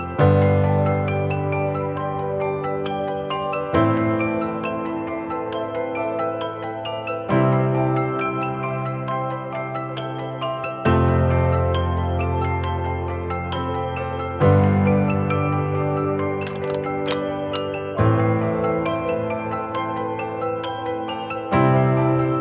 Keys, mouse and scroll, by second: 7.8 shift+click, 9.8 shift+click, 17.0 alt+click.